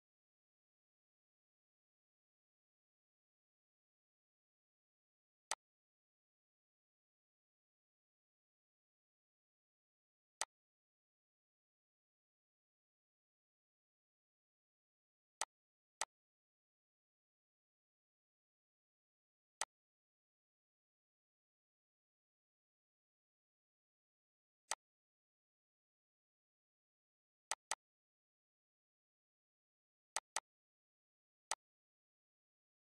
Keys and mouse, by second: 1.2 click, 2.4 click, 3.0 click, 4.7 click, 5.5 typing, 11.6 click, 12.8 ctrl+d, 13.8 Delete, 14.6 click, 15.7 click, 16.6 Delete, 17.3 click, 18.5 click, 19.1 Delete, 20.2 click, 21.8 click, 23.0 click, 24.3 click, 25.0 click, 28.8 click, 30.0 click, 32.0 click, 32.6 click.